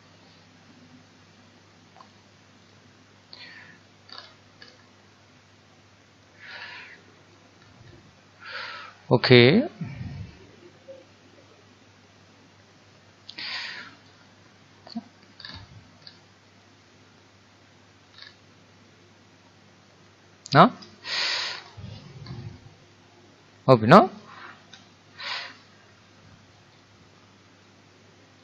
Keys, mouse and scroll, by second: 2.1 click, 3.4-4.2 middle drag, 4.2-5.2 scroll down 8, 5.2-6.6 middle drag, 6.6-7.1 scroll up 4, 7.1-7.7 middle drag, 7.7-10.0 scroll up 2, 14.1 click, 15.4-16.5 scroll down 6, 16.6-18.2 middle drag, 18.2-18.8 scroll down 4, 18.8-21.6 middle drag, 21.6 scroll up 1, 21.7-22.3 scroll down 1, 22.3 scroll down 2, 22.6-24.6 middle drag, 24.6-25.0 scroll up 1, 25.0-26.7 shift+middle drag, 26.7-28.4 right drag.